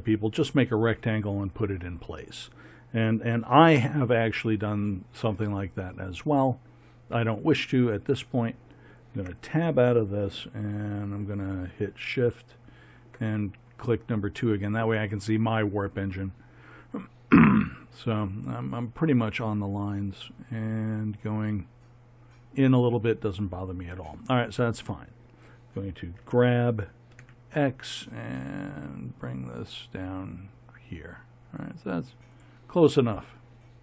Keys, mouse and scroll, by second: 9.1 Tab, 26.2 g.